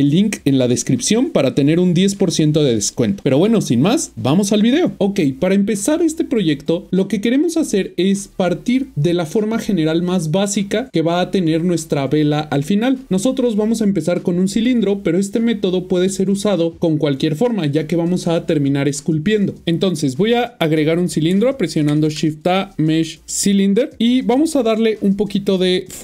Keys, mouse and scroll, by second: 21.9 a, 23.5 click.